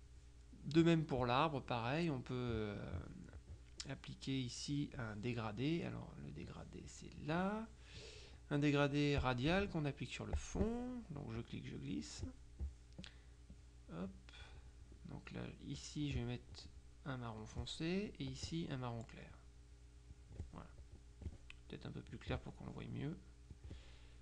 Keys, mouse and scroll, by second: 1.1 middle click, 7.2 click, 9.3 click, 10.4 click, 11.4 click, 13.6 click, 15.8 click, 17.5 click, 18.4 click, 19.4 click, 20.2 click, 22.2 click, 23.6 click.